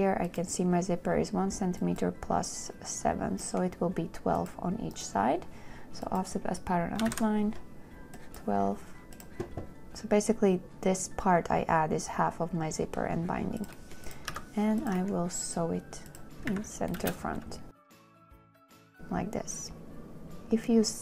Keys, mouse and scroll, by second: 7.3 KP_1, 7.4 KP_2, 11.5 KP_2, 14.6 n, 16.8 a.